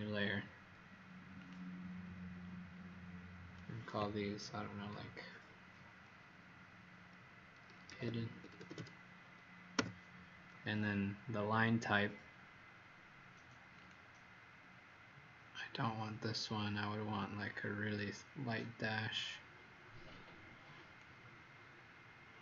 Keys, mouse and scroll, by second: 7.6-9.1 typing, 9.7 Return, 13.7 click.